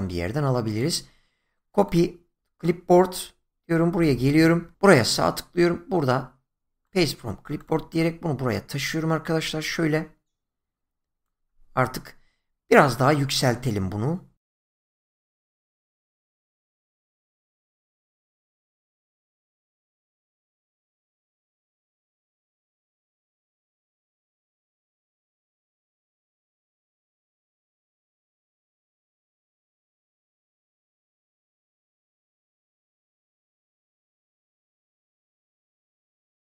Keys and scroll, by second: 22.8 Right, 24.6 Right, 25.3 ctrl+z, 27.6 ctrl+z, 36.3 ctrl+z.